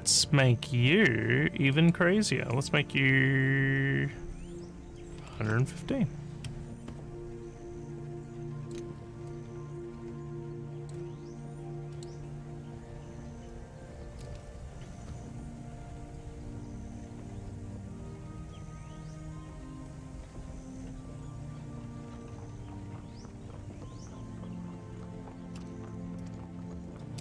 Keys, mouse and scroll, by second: 1.7 click, 8.4 click, 9.3-10.9 alt+drag, 11.9 click, 25.6-27.2 typing.